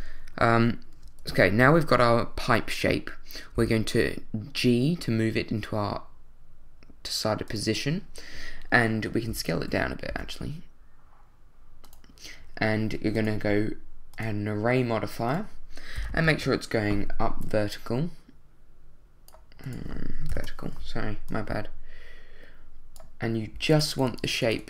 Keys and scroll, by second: 3.5 g, 9.3 s, 9.5 z, 10.1 s, 16.0 0, 16.3 Return, 16.4 d, 20.3 0, 20.4 d.